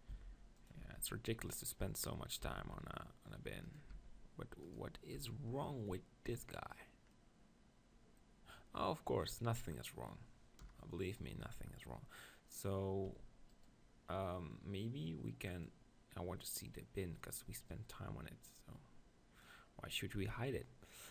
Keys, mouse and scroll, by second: 0.1 s, 0.8 g, 1.9-3.4 middle drag, 2.5 z, 3.5 middle click, 3.7 right click, 4.0 Tab, 5.1 Tab, 9.2-11.4 middle drag, 10.6 KP_0, 13.5-15.9 right drag, 15.9-17.9 drag, 21.0-21.1 middle drag.